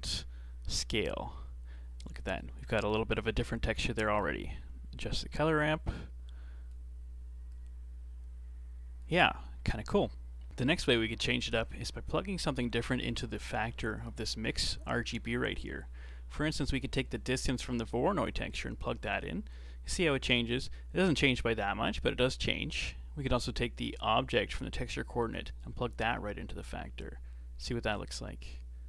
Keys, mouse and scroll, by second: 1.2 scroll up 3, 3.2 click, 3.9-5.0 middle drag, 5.0-9.5 drag, 9.5-10.5 scroll down 1, 11.3-14.3 middle drag, 18.5-21.5 drag, 25.2-27.1 drag.